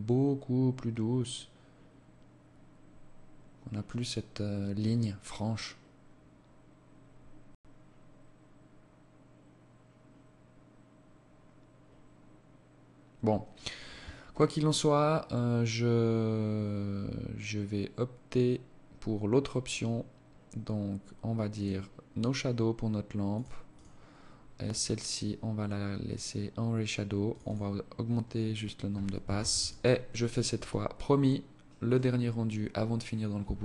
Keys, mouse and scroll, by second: 22.5 click, 23.4 right click, 24.8 click, 26.0 click, 26.2 click, 28.1 ctrl+s.